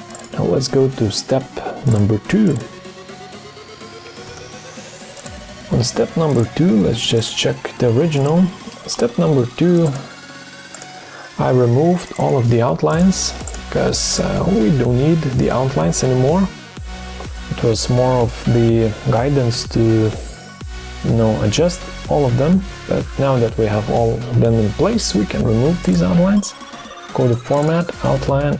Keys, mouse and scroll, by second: 0.5 ctrl+d, 4.3 BackSpace, 4.4 BackSpace.